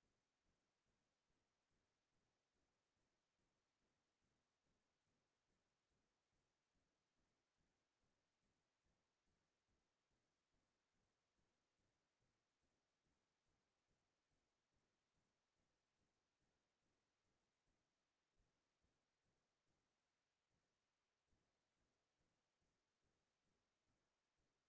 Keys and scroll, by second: 1.2-3.7 typing, 6.6 BackSpace, 7.1 BackSpace, 7.4 BackSpace, 18.1-19.0 typing, 20.0 j, 21.3 o, 23.3-23.9 typing.